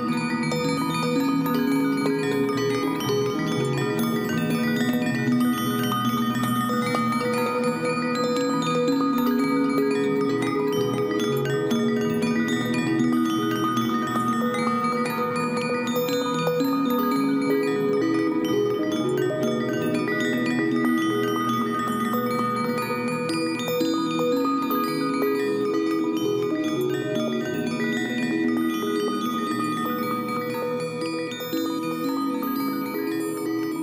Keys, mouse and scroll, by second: 4.3 shift+click, 5.2 shift+click, 6.0 ctrl+g, 8.2 ctrl+j, 10.3 right click, 15.9 right click, 20.3 Up, 20.5 Up, 20.8 Right, 21.0 Right, 21.2 Right, 21.3 Up, 21.6 Up, 21.8-23.3 Up.